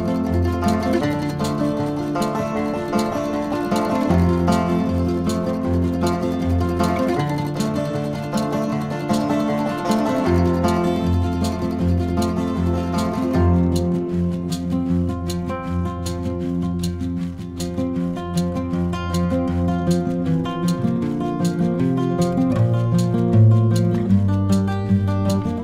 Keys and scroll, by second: 22.8 v.